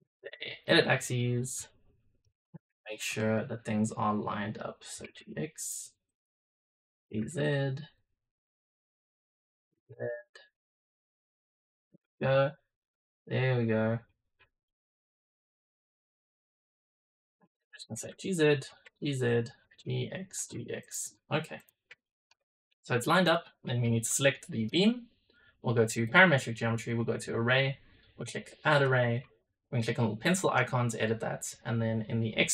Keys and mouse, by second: 0.5 click, 1.1 click, 1.5 middle click, 1.8 click, 2.7 shift+click, 3.1 middle click, 3.7 click, 4.2 middle click, 4.8 g, 6.0 click, 6.6 middle click, 7.0 g, 8.3 click, 8.8 middle click, 9.6 g, 12.2 Tab, 12.9-14.0 middle drag, 14.6-16.1 middle drag, 16.1-16.6 drag, 17.1 shift+middle drag, 17.8 g, 18.5 g, 19.5 g, 20.2 g, 21.5 click, 21.9 shift+middle drag, 22.4 middle click, 23.1 click, 25.9 drag, 26.8 click, 28.9 click, 32.1 click.